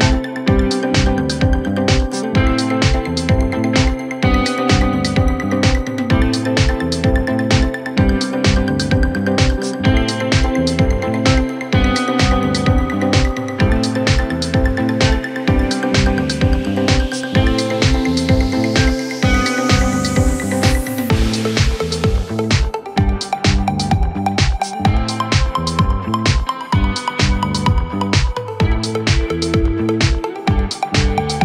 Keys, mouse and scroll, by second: 0.1 click, 1.0-2.0 scroll up 2, 2.1 Tab, 3.2 ctrl+r, 6.5 Tab, 7.3-7.7 scroll down 1, 7.7 middle click, 8.5-11.1 right drag, 11.1 KP_1, 12.1-12.6 scroll up 1, 12.6 Tab, 13.3-14.7 middle drag, 14.7-16.3 scroll down 5, 16.3 KP_1, 17.1 shift+middle click, 17.5-18.0 scroll up 2, 18.9 ctrl+r, 22.0 middle click, 22.8-23.4 scroll up 1, 23.4 Tab, 24.6-25.3 scroll down 5, 25.3-28.4 middle drag, 28.4 KP_1, 29.2-29.7 shift+middle drag, 29.7-30.5 scroll up 4, 30.5-31.4 shift+middle drag.